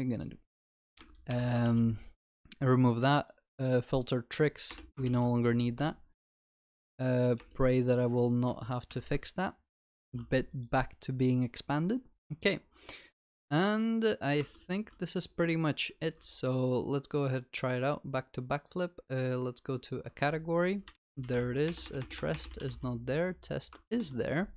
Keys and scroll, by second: 1.3 ctrl+y, 1.8 ctrl+s, 5.1 ctrl+s, 8.9 ctrl+y, 13.3 ctrl+s.